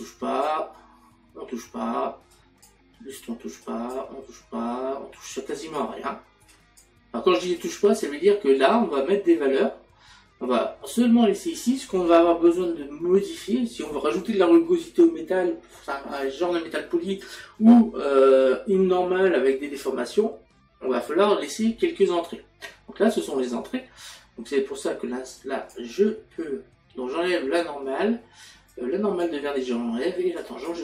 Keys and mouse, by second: 0.0 click, 2.3 click, 3.6 click, 25.4 click, 28.7 click.